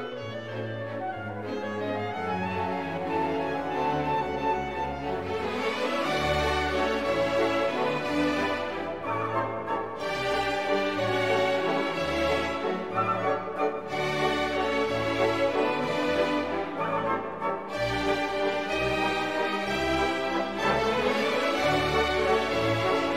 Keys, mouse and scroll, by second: 0.0 click, 2.1-12.4 drag, 13.6 click, 15.4 click, 16.4 click, 18.5 scroll up 1, 19.2 click, 20.0 click, 21.4-21.8 scroll down 1, 22.0 scroll down 1, 22.9 click.